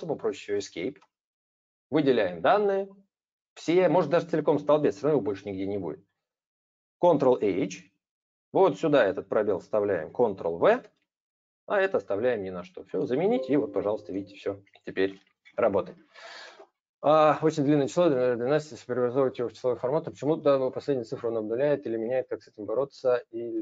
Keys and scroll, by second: 7.6 ctrl+h, 10.5 ctrl+v.